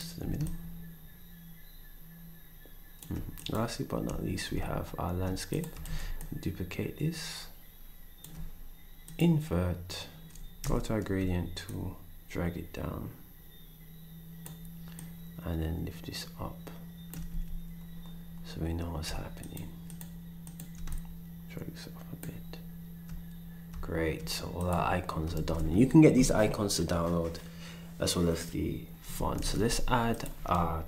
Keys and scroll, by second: 5.8 ctrl+shift+d, 10.6 g, 17.2 s, 25.3 ctrl+s, 29.4 ctrl+s, 30.5 ctrl+s.